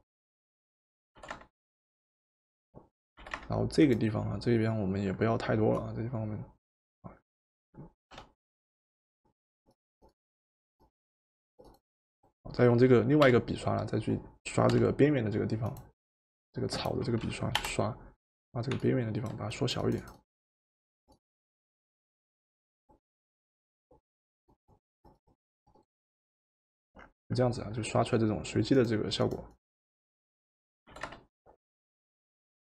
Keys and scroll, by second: 1.2 v, 3.2 v, 8.1 b, 13.1-14.7 typing, 17.5 Return, 30.9 v.